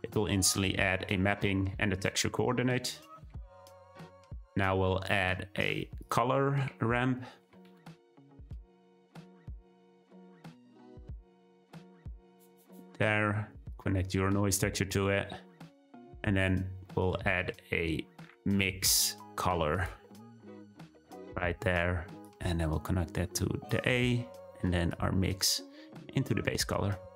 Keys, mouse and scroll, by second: 3.8-10.1 drag, 13.7-14.8 drag, 16.0 click, 22.2-23.6 drag, 24.8-26.2 drag.